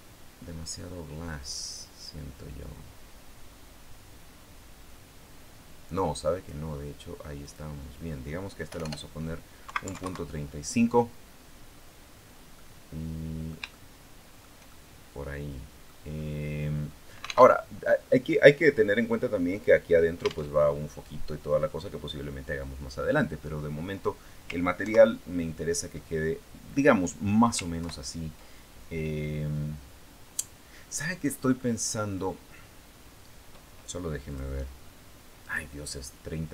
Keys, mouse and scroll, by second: 7.2 click, 8.6 BackSpace, 9.4 KP_Decimal, 9.6 KP_3, 9.7 KP_5, 9.8 KP_Enter, 11.6-12.0 scroll down 2, 12.3-14.4 middle drag, 14.5-15.8 shift+middle drag, 16.0 scroll up 2, 17.2 alt+Tab, 20.4 alt+Tab, 24.6 ctrl+Right, 26.2 ctrl+scroll down 2, 27.6 ctrl+Left, 31.4 middle click, 34.0 click, 35.2 click.